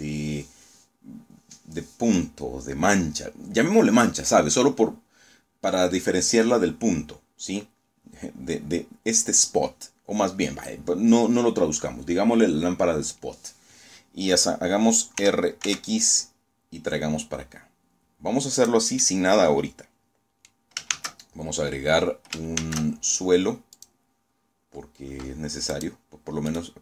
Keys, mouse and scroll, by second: 14.1 r, 14.5 x, 17.5 click, 17.9-19.5 middle drag, 19.8 shift+a, 21.5 shift+a, 22.6 click, 24.6 click, 25.3 right click, 26.0 ctrl+click.